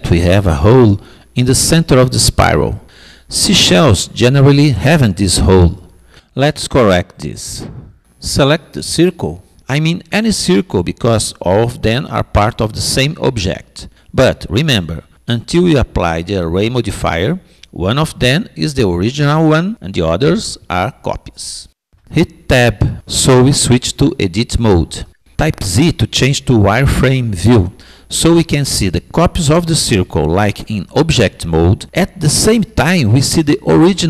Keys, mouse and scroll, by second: 8.3-10.2 drag, 20.2 Tab, 24.5 z.